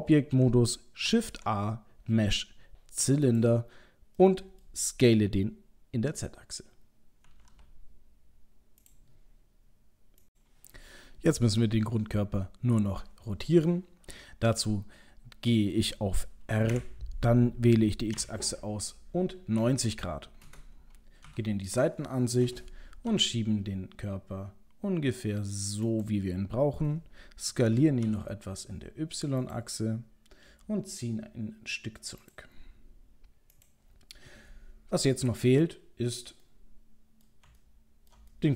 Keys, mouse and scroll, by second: 1.1 shift+a, 4.2 middle click, 4.9-5.6 scroll down 2, 7.3 s, 11.6 middle click, 15.8 middle click, 16.8 r, 21.3 KP_3, 21.8-23.1 scroll up 5, 23.1 g, 27.7 s, 30.5 g, 36.5 middle click, 37.6 ctrl+middle click, 38.4 middle click.